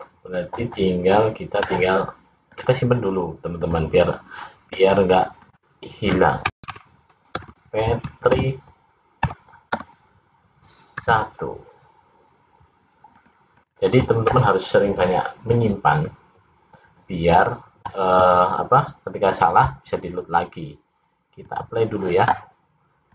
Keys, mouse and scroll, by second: 2.6 click, 21.5 click, 23.0 click.